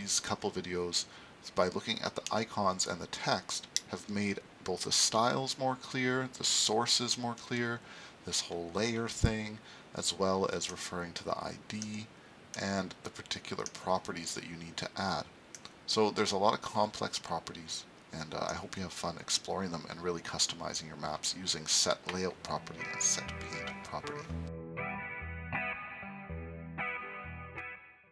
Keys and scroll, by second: 16.3 super+s.